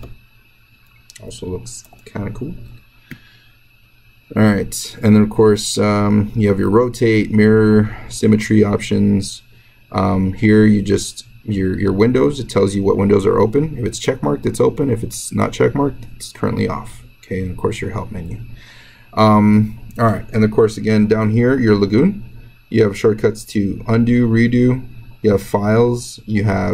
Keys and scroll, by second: 1.7 ctrl+z.